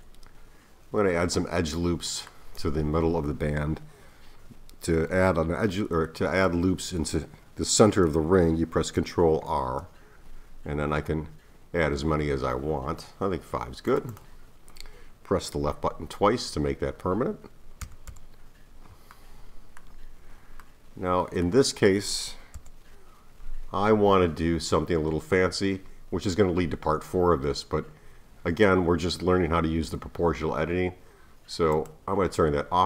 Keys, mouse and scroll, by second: 0.9-1.6 scroll up 1, 1.6-4.6 middle drag, 9.4 ctrl+r, 17.8 a, 18.1 a, 19.1-22.6 middle drag, 22.6 KP_1, 28.0-29.2 scroll down 1, 29.2-30.9 scroll up 2, 30.9-31.7 scroll up 1, 31.7 click.